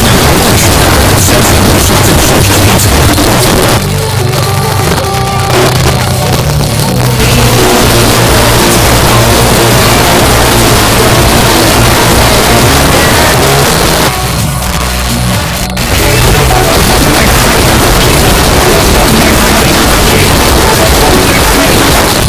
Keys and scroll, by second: 3.1 Page_Down, 13.3 Page_Down, 22.0 Page_Down.